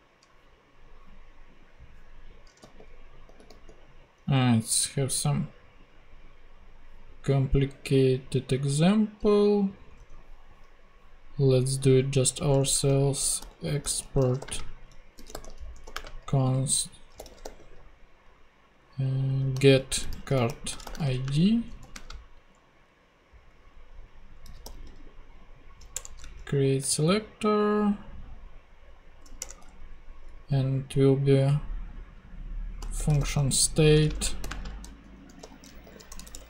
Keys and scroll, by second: 2.6 super+g, 9.9 super+Tab, 12.5 Return, 13.1-17.9 typing, 19.5-21.9 typing, 24.4 c, 25.9 Return, 29.4 Return, 32.5-36.4 typing.